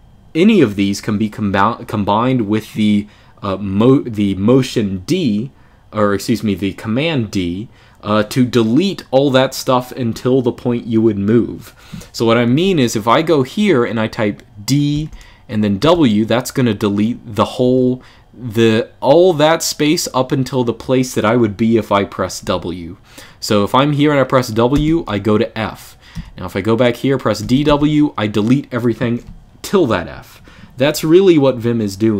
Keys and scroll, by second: 14.7 d, 15.5 w, 17.4 typing, 24.5 typing, 25.9 typing, 27.1 typing, 30.5 typing.